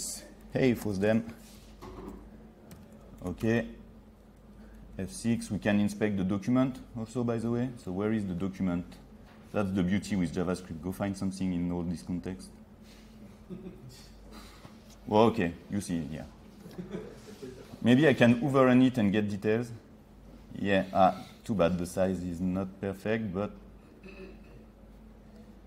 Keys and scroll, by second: 4.9 F6.